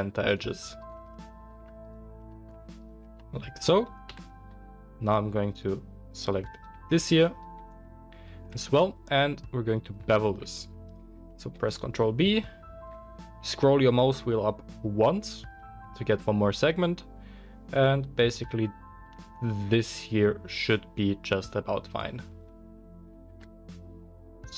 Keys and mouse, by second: 0.2 shift+middle click, 0.2 shift+right click, 0.7 shift+middle click, 0.7 shift+right click, 1.8 shift+middle click, 1.8 shift+right click, 2.7 shift+middle click, 2.8-10.3 shift+drag, 4.0 KP_1, 6.9 alt+shift+middle click, 6.9 alt+shift+right click, 10.3-21.9 middle drag, 11.5 ctrl+b, 21.9 click, 21.9-24.5 middle drag.